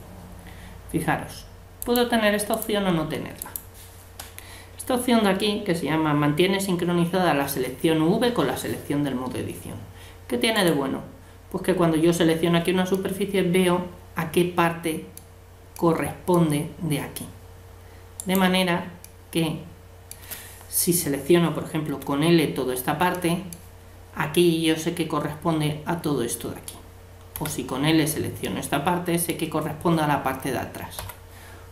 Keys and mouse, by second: 0.4-1.6 drag, 1.8-5.1 drag, 10.5-12.4 right drag, 13.0-14.7 middle drag, 15.7-17.6 middle drag, 18.2-19.8 right drag, 19.0 click, 19.0-20.8 middle drag, 21.9 l, 23.1-25.0 middle drag, 27.3 l, 28.4-30.5 middle drag, 31.0 l.